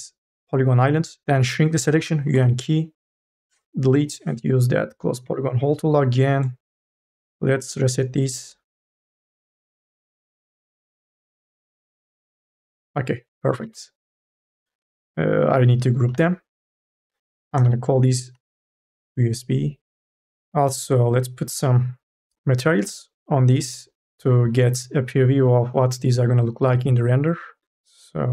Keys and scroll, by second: 2.5 u, 2.5 k, 3.6 Delete, 13.6 q, 14.6 ctrl+z, 16.2 alt+g, 17.7 shift+u, 18.5 s.